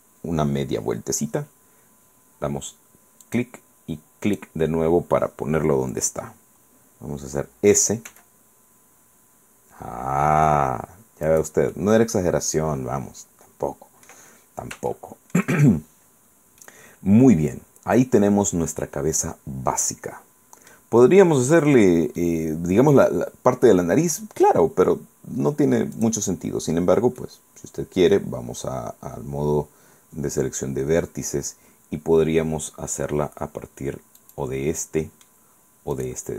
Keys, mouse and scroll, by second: 3.4 click, 4.4 click, 8.2 s, 11.4 click, 11.8-14.4 middle drag, 15.0 shift+middle click, 15.9-16.4 shift+scroll up 3, 16.4 scroll down 2, 16.7-19.4 middle drag, 19.4-21.0 drag, 21.2 scroll up 2, 21.6 scroll down 2, 22.3-24.8 middle drag, 26.1 click, 27.3 scroll down 2, 27.3-28.5 middle drag, 28.8 scroll up 2, 34.3 click, 34.9 middle click, 36.0 right click.